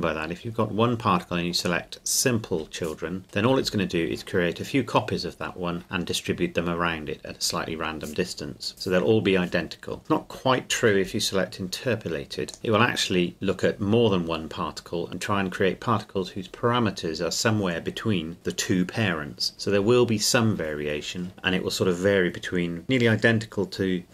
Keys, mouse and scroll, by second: 0.3-1.6 scroll up 2, 1.6-3.3 drag, 12.5 click.